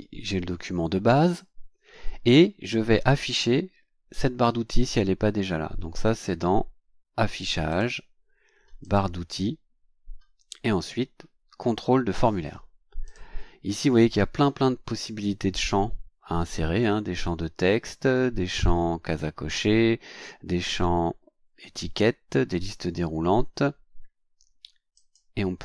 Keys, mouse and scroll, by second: 7.7 click, 8.8 click, 13.0 click, 24.9 click.